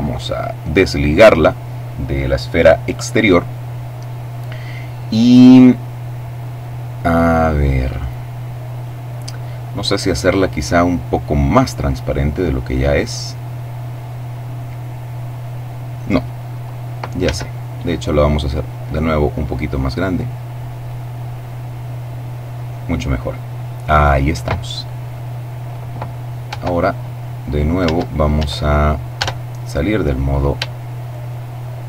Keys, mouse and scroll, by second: 0.3 click, 17.0 s, 20.6 click, 26.2 Tab, 27.5 Caps_Lock, 28.9 Tab, 30.7 shift+right click.